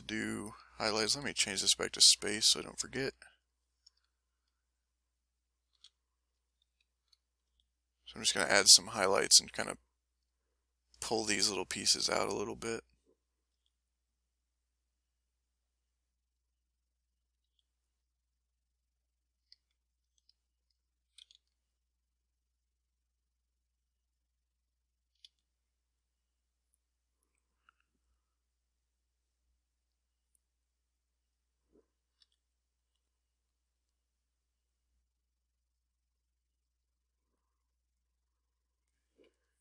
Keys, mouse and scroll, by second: 1.1 e, 2.0 click, 2.7 click, 3.4 click, 5.7 s, 6.1 click, 7.5 f, 8.0 click, 9.1 f, 9.2 click, 10.4 ctrl+click, 11.2 ctrl+middle click, 12.4 click, 13.5 f, 13.7 click, 14.5 click, 15.2 click, 16.0 click, 16.7 click, 17.4 f, 17.7 click, 18.2 click, 18.7 click, 19.3 click, 20.0 a, 20.3 click, 21.2 s, 21.6 click, 22.0 click, 22.5 click, 23.0-24.3 drag, 24.5 click, 25.2 s, 25.7 click, 26.4 click, 27.2 click, 28.5 click, 29.1 click, 29.6 click, 30.1 click, 30.7 click, 32.2 f, 32.7 click, 33.5 click, 34.0 click, 35.1 click, 35.5 click, 36.0 click, 36.5 click, 36.9 click, 37.7 click, 39.3 click.